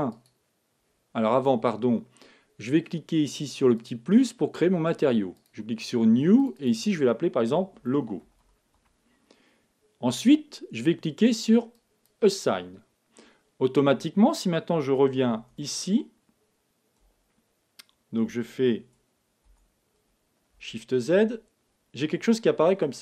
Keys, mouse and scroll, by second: 0.1-1.9 drag, 3.7-8.4 drag, 11.7-13.5 drag, 19.4 Tab, 22.5 middle click.